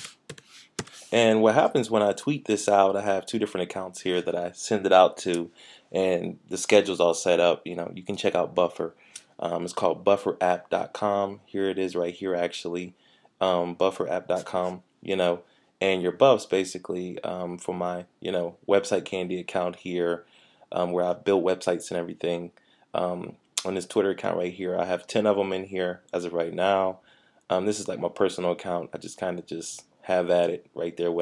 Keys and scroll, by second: 0.0-0.9 typing, 2.2-2.7 typing, 14.3 typing, 15.9 typing.